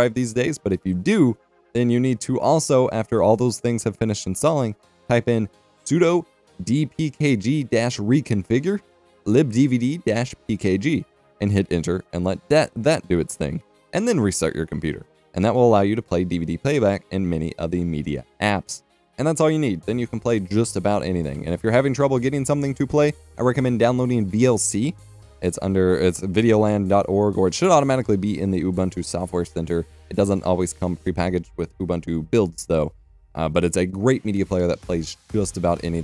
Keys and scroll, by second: 11.2-19.5 typing, 23.0-25.4 typing.